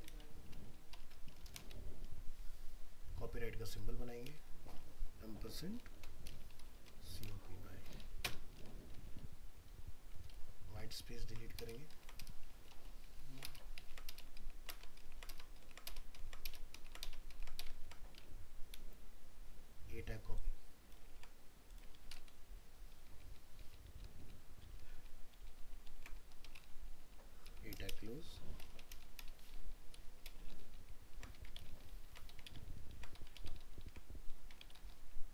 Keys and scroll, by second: 10.3 ctrl+Delete, 11.0 ctrl+Right, 12.7 ctrl+z, 13.1 ctrl+Right, 21.2 ctrl+c, 21.9 ctrl+v, 22.3 ctrl+Right, 22.9 ctrl+v, 23.1 ctrl+Right, 23.9 ctrl+v, 24.0 ctrl+Right, 24.6 ctrl+v, 24.8 ctrl+Right, 25.3 ctrl+v, 25.5 ctrl+Right, 25.9 ctrl+v, 30.4 ctrl+c, 30.5 ctrl+Left, 31.6 ctrl+v, 31.7 ctrl+Left, 32.5 ctrl+v, 32.6 ctrl+Left, 33.4 ctrl+v, 33.5 ctrl+Left, 34.6 ctrl+v, 34.8 ctrl+Left.